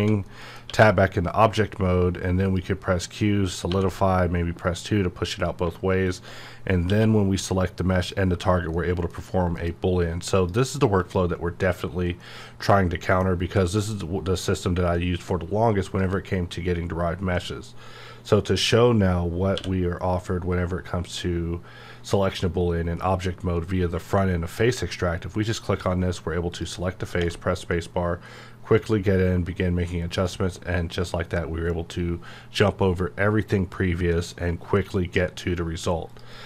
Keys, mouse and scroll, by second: 0.3 middle click, 0.7 q, 2.4 click, 3.7 2, 5.3 click, 6.9 q, 7.9 click, 8.7 middle click, 9.5 KP_Decimal, 10.3 click, 12.2-15.9 middle drag, 15.9 click, 19.6 q, 25.4 click, 26.5 click, 27.2 space, 28.8 click, 36.1 click.